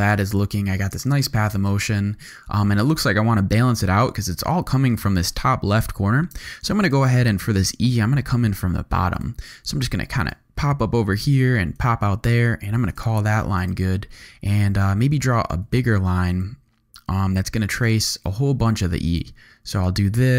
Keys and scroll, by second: 0.1 alt+space, 0.9 space, 6.3 space, 8.0 g, 13.4 z, 14.3 v, 15.5 g.